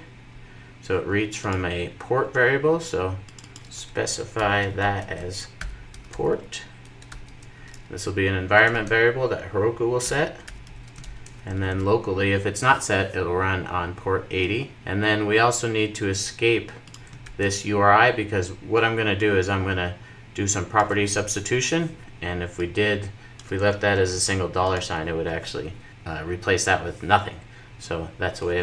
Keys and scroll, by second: 11.1 super+s, 11.1 super+s, 23.7 super+s.